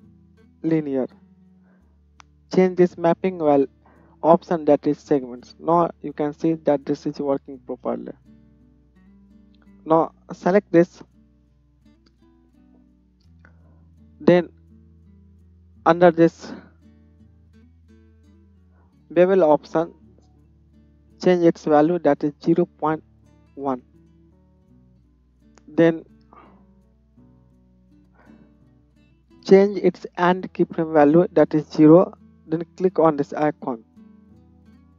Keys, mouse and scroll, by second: 5.1 space, 7.8 space, 10.2-17.0 middle drag, 17.0-25.0 drag, 27.2-33.3 drag, 33.3-34.6 middle drag, 34.6-34.9 drag.